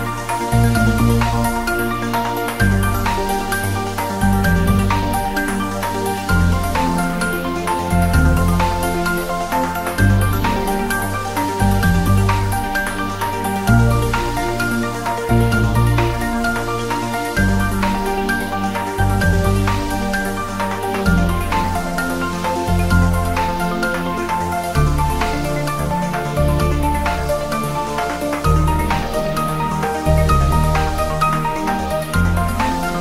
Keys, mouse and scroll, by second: 0.4 click, 0.7 scroll down 1, 1.2 scroll up 1, 1.6 shift+a, 1.8 click, 2.3 i, 2.7 m, 3.0 click, 3.7 shift+a, 4.1 click, 4.6 e, 5.0 click, 6.5-8.2 typing, 6.7 click, 7.1 click, 8.1 click, 9.0 click, 9.3 g, 9.8 click, 10.0-10.6 scroll down 2, 12.5 scroll down 1, 12.6 ctrl+s, 13.1 g, 13.6 click, 13.7 scroll up 1, 14.7-15.2 drag, 16.1 g, 16.5 click, 16.6-17.1 scroll up 1, 17.6 click, 19.8-21.4 drag, 23.6-24.2 scroll down 1, 26.0 scroll up 1, 26.7-27.8 drag, 28.6 drag, 30.1 ctrl+s, 32.6 scroll up 1.